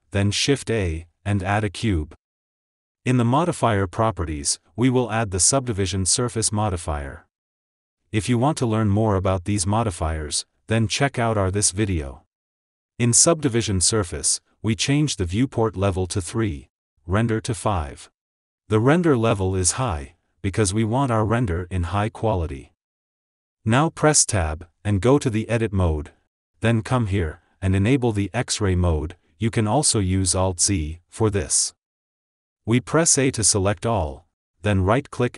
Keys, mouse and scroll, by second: 0.5 shift+a, 3.5 click, 7.1-8.5 drag, 14.5-19.9 drag, 21.5-22.9 scroll up 5, 24.4 Tab, 24.9-27.4 scroll up 1, 27.9 click, 30.3 alt+z, 32.4 click, 33.9 ctrl+shift+z, 35.0-35.3 right drag.